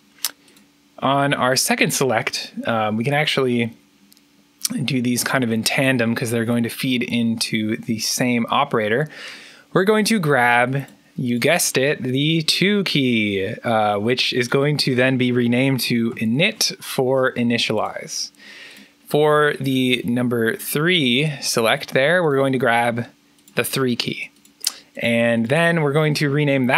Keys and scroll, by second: 15.5-16.8 typing.